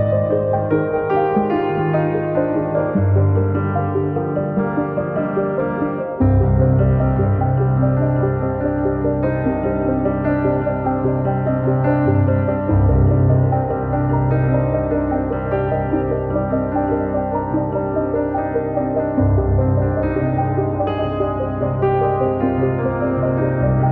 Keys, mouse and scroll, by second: 0.4 click, 0.4 scroll down 4, 0.6 middle click, 1.7 scroll up 6, 1.9 click, 2.5 scroll down 2, 2.6 middle click, 2.8 click, 3.1 KP_1, 3.3 scroll up 3, 3.4 scroll down 1, 3.5 click, 5.0 scroll up 2, 5.3-6.4 drag, 7.9 scroll down 2, 8.0 scroll up 1, 8.3-10.3 drag, 11.6-13.1 drag, 13.1 scroll down 2, 13.1 middle click, 13.4 scroll up 1, 13.5 click, 15.2-15.5 scroll up 2, 15.3 middle click, 15.5-17.0 drag, 17.8 middle click, 18.1 click, 20.7 scroll down 3, 20.8 middle click, 20.9 scroll up 5, 21.0 middle click, 21.4 click, 22.2 scroll down 2, 22.3 scroll up 1, 22.4 middle click, 22.8 click.